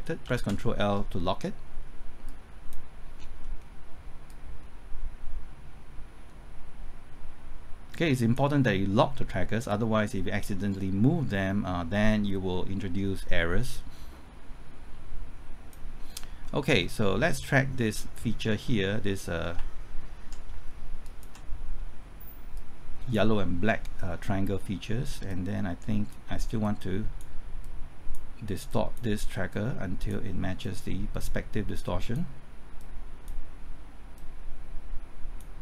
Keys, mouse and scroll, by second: 0.2 ctrl+l, 2.3 click, 3.2 scroll down 1, 3.4 middle click, 4.3-16.3 drag, 16.3 scroll up 1, 16.8 middle click, 17.1 scroll up 1, 17.8 middle click, 18.2-19.0 scroll up 1, 21.0 ctrl+click, 22.5-35.6 drag.